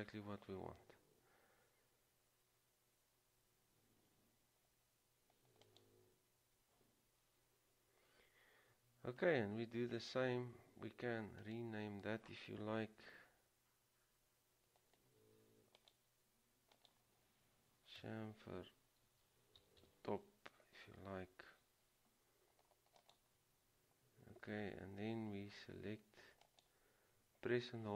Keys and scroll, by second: 19.3-19.8 typing, 23.5 typing.